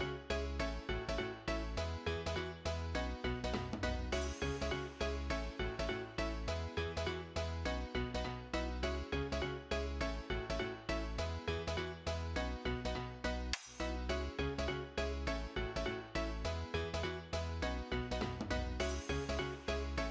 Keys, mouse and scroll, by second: 2.3 double click.